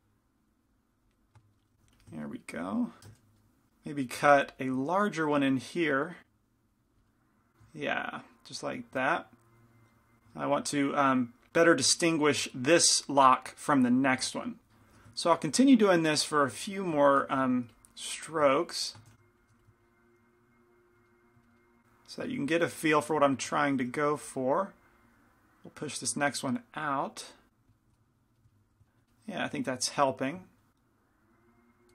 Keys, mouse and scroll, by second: 1.2-3.7 middle drag, 1.9 f, 3.7-7.1 drag, 4.3 f, 7.1-10.2 middle drag, 10.3-11.5 middle drag, 11.7-15.4 middle drag, 15.4 ctrl+z, 15.8-17.4 middle drag, 17.4 shift+c, 17.6 f, 19.2 shift+f, 19.9 click, 21.1-23.8 middle drag, 23.8 shift+f, 25.0-26.9 drag, 27.8-30.7 middle drag, 30.7 click, 30.7 right click.